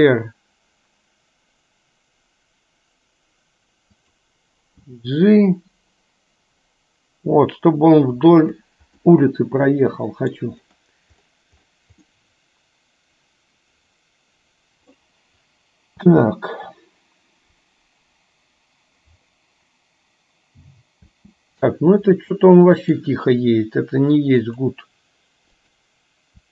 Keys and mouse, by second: 5.1 g, 9.3-10.6 middle drag, 12.4-15.1 middle drag, 16.2 space, 21.3 space, 22.4-23.2 middle drag, 24.5-25.3 drag, 25.8 click.